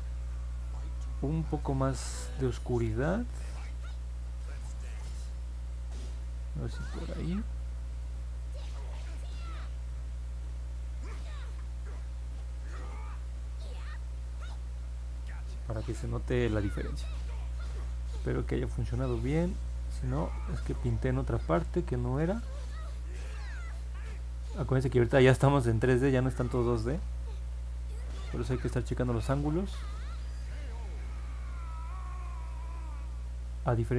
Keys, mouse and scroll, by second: 18.2-19.2 alt+drag, 19.5 middle click, 20.1 middle click, 23.1-25.5 drag, 25.8 ctrl+z, 30.4-33.9 drag.